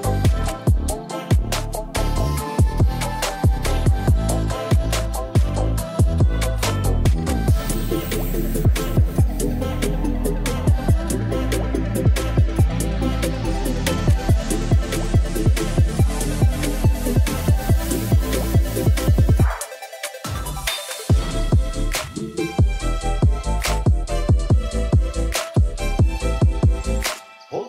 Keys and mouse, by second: 0.6-0.9 drag, 0.9 middle click, 1.3 KP_0, 2.2 r, 2.3 x, 3.5 click, 4.8 drag, 5.6 g, 5.7 y, 6.1 x, 7.2 click, 7.6 r, 7.9 e, 8.2 click, 8.8 r, 8.9 z, 9.9 click, 10.2 middle drag, 10.6 ctrl+s, 11.0 KP_0, 11.8 shift+d, 12.3 y, 14.2 r, 14.4 z, 16.7 click, 16.9 middle drag, 17.5 middle drag, 18.0 r, 18.1 z, 19.5 click, 19.9 middle click, 20.3 ctrl+s, 20.7 KP_0, 23.3 shift+click, 24.6 shift+drag, 25.2 ctrl+s.